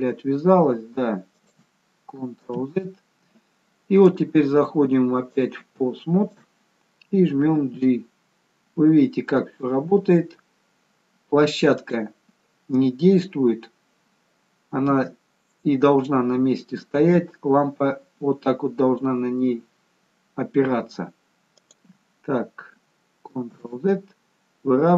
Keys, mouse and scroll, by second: 2.6 ctrl+z, 4.1 click, 6.4 click, 7.7 g, 15.0 g, 23.7 ctrl+z.